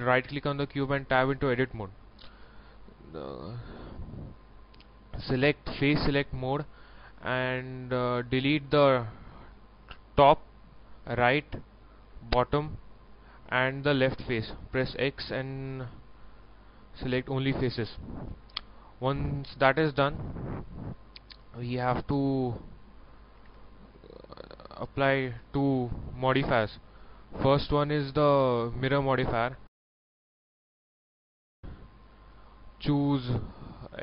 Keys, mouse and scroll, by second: 0.1 right click, 0.6 Tab, 1.1-2.5 middle drag, 3.2 click, 3.9 middle click, 4.5 scroll up 1, 6.7 middle click, 8.4 a, 9.5 right click, 11.0 middle click, 11.8 shift+right click, 12.3 middle click, 13.8 shift+right click, 14.2 middle click, 16.5 middle click, 17.0 click, 17.6 middle click, 19.2 shift+middle click, 22.0 ctrl+middle click, 23.0 ctrl+middle click, 23.5 shift+middle click, 24.6 click, 25.4 scroll down 1, 25.7 ctrl+middle click, 26.8 click, 29.6 shift+middle click, 30.5-31.5 scroll up 1, 31.7 ctrl+middle click, 32.2 shift+middle click.